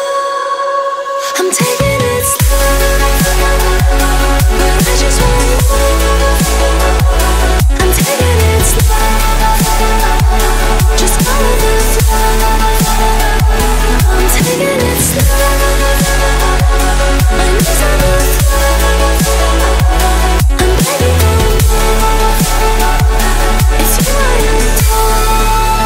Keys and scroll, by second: 10.5 Up.